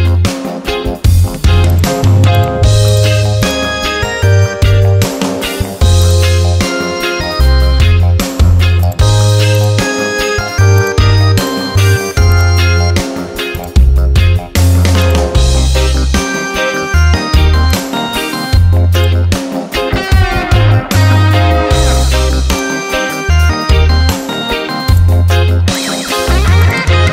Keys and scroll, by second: 4.0 ctrl+j.